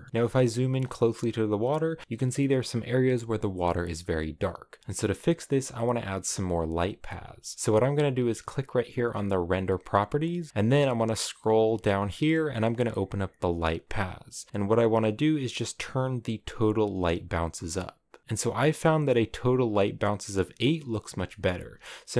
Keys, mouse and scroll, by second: 0.1 shift+middle click, 0.4 scroll up 2, 18.2-20.7 drag, 20.7 scroll down 5, 21.3 shift+middle click, 21.6 scroll up 5, 21.8-22.1 shift+middle drag.